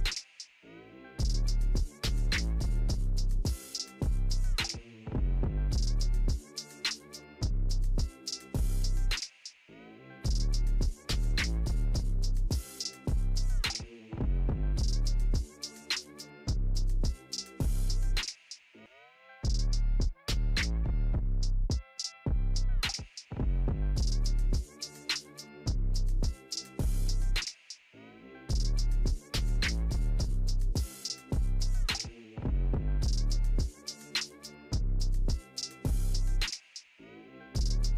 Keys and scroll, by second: 4.3 ctrl+j.